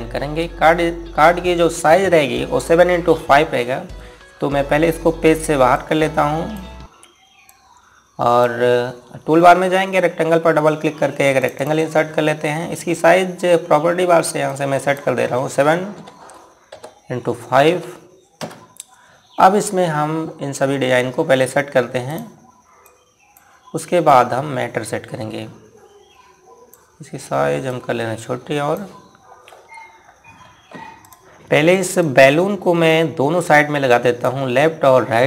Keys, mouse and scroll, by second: 4.8 scroll down 1, 6.3 click, 12.1 click, 15.0 click, 16.5 KP_7, 17.3 Tab, 18.2 KP_5, 18.9 KP_Enter, 22.6-23.5 scroll down 1, 23.5 click, 30.0 scroll up 1, 31.5 click.